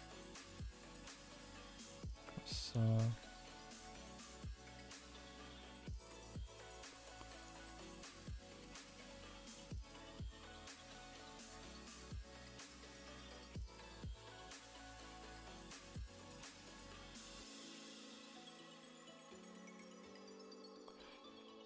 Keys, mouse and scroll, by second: 0.4 g, 1.4 r, 1.9 s, 3.1 g, 4.0 e, 5.8-6.9 drag, 6.9-7.9 middle drag, 7.9 KP_0, 8.7 shift+middle click, 8.9 z, 9.7 shift+middle click, 9.9 scroll up 2, 10.4 alt+click, 11.1 2, 11.3 alt+click, 11.8 g, 13.2 r, 13.9 g, 14.8 click, 15.3 g, 17.8 Tab, 18.2 a, 18.5 z, 19.2-19.6 middle drag, 19.6-20.0 scroll up 5, 20.0-20.5 shift+middle drag, 20.5-21.2 scroll up 6, 20.8 shift+middle drag, 21.2 Tab, 21.4 middle click.